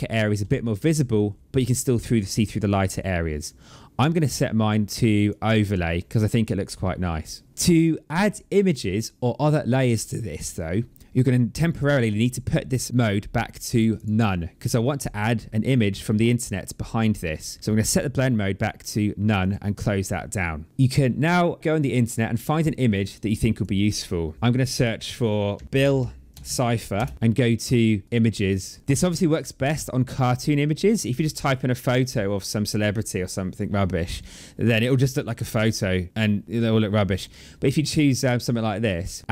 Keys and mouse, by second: 3.9 click, 5.1 click, 11.6 click, 13.8 click, 17.7 click, 21.5 click, 23.4 click, 25.4 b, 26.2 space, 26.8 Return, 28.0 click.